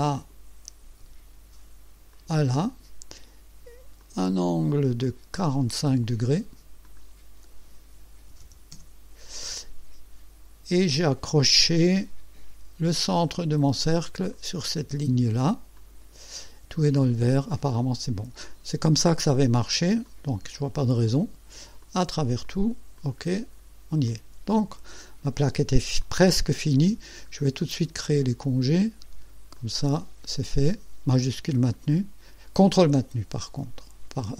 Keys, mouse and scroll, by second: 0.1 click, 2.1 click, 2.7 right click, 4.0 click, 5.0 click, 6.8 click, 8.2 KP_4, 8.4 KP_5, 8.8 KP_Enter, 11.3-12.1 drag, 13.3 click, 14.3 click, 15.8 click, 17.7 click, 20.0 click, 21.8 click, 22.4 click, 23.0 click, 23.5 scroll down 2, 24.1-25.7 drag, 26.0-26.7 drag, 26.9-27.4 scroll up 1, 27.6 right click, 29.5 click, 31.7 ctrl+click.